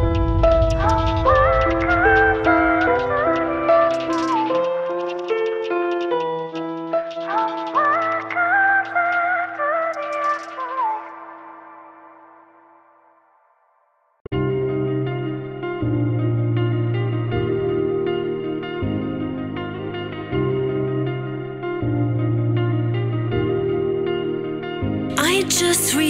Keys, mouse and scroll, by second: 0.1 alt+click, 0.2 z, 1.1 Tab, 1.2 alt+click, 2.0 alt+click, 4.8 click, 6.4 click, 7.3 scroll up 2, 11.9-13.2 drag, 13.2 s, 16.9 u, 19.9 g, 22.0 click, 22.4 click, 23.4-24.5 drag.